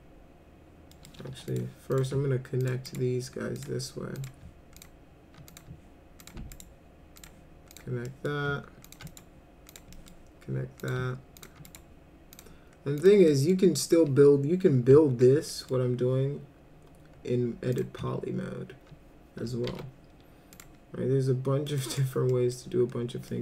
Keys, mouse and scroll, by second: 0.9 middle click, 1.3 1, 1.5 click, 1.9 click, 2.6 ctrl+click, 2.9 right click, 3.6 click, 4.2 click, 4.8 ctrl+click, 5.5 click, 6.2 ctrl+click, 6.6 right click, 7.2 click, 7.7 click, 8.1 middle click, 8.8 ctrl+click, 9.1 right click, 9.7 click, 9.9 middle drag, 10.8 click, 11.4 ctrl+click, 11.7 right click, 12.4 click, 13.0 click, 13.3 middle click, 15.5 middle click, 17.8 click, 19.7 alt+c, 20.5 click, 21.7 click, 21.9 right click, 22.3 middle click, 23.3 middle click.